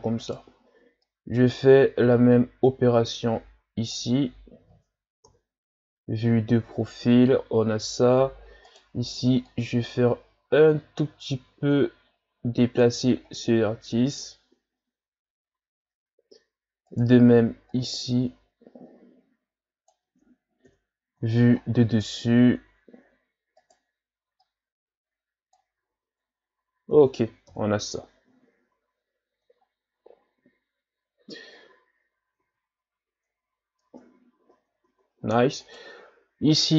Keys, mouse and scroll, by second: 0.2 right click, 1.0-4.0 drag, 5.3 KP_3, 8.7 right click, 9.5-12.6 drag, 14.1-14.8 shift+scroll down 4, 14.8-16.1 ctrl+scroll down 3, 17.0 right click, 17.7-20.7 drag, 20.7 KP_7, 21.6-22.7 shift+scroll up 9, 23.6 right click, 24.4-25.9 drag, 25.9 Tab, 26.4-26.8 scroll down 4, 27.5 KP_1, 28.6-29.5 shift+scroll up 2, 29.7-30.8 shift+scroll up 5, 31.8 shift+scroll up 1, 32.4 Tab, 33.1 Tab, 33.8 Tab, 34.5 Tab, 34.8 Tab, 35.6 right click.